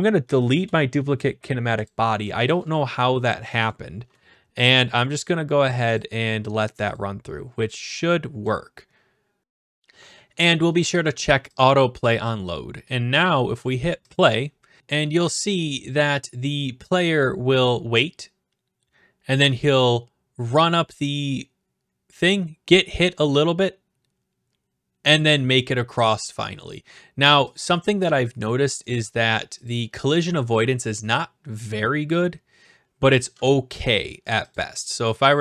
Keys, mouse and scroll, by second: 0.2 Delete, 0.5 Return, 1.8 click, 2.6 click, 2.9 right click, 3.3-4.1 typing, 4.1 right click, 6.0 click, 6.9 click, 8.4 click, 11.6 click, 14.1 click, 27.5 click, 28.9 click, 29.8 click, 31.2 click, 34.5-35.4 drag.